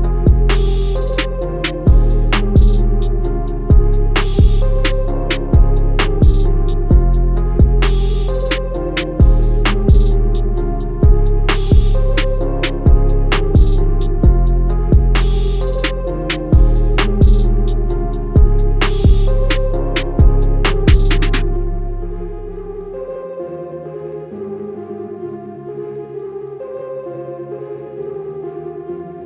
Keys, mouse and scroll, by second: 2.0 click, 4.4 ctrl+z, 5.1 click, 11.8 click, 13.2-15.3 alt+scroll down 2, 16.4 alt+scroll up 2, 17.7 scroll up 1, 20.4 click, 22.9 BackSpace, 24.7 click, 25.7 BackSpace, 28.6 click.